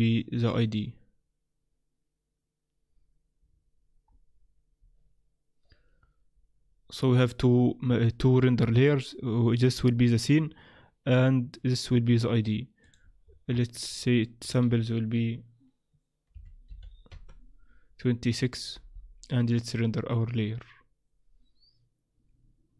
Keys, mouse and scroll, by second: 12.8 click, 13.2-13.9 scroll down 5, 13.5-14.4 scroll up 7, 14.4 click, 14.4-16.0 scroll up 1, 19.2 F12.